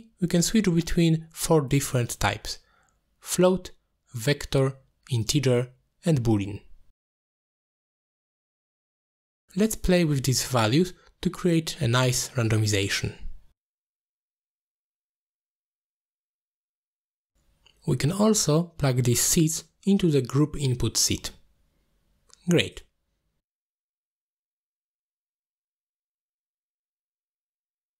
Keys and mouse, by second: 0.5 middle click, 1.5-6.2 drag, 9.2 middle click, 9.6-10.8 drag, 11.3 middle click, 11.7 click, 11.8-13.1 drag, 14.0 middle drag, 14.6 middle click, 16.7 middle click, 17.1 shift+a, 20.2-20.7 drag, 21.5-22.2 drag, 23.4 click, 24.3 middle click, 24.6 middle click, 24.8 click, 25.6 click, 25.9 click, 26.1 click, 27.1 click, 27.2 click, 27.7 drag.